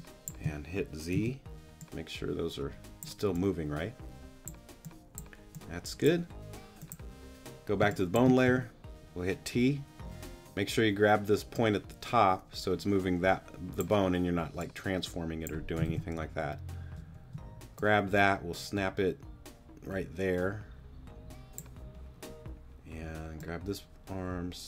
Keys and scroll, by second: 1.1 z, 7.8 space, 8.5 t, 15.9 super+z.